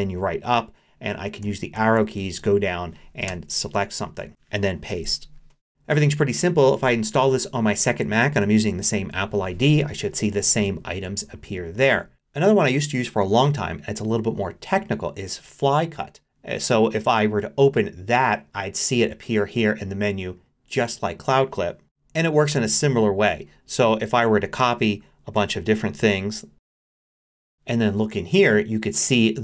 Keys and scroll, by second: 1.4 Down, 3.3 Return, 4.9 super+v, 25.4 super+c, 26.9 super+c, 27.8 super+c.